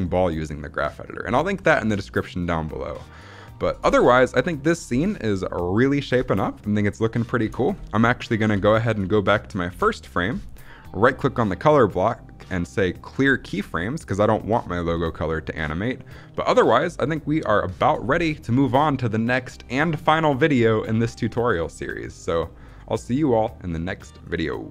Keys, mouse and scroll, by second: 3.7 space, 7.3 space, 9.6 shift+Left, 10.9-13.1 right drag, 14.7 space.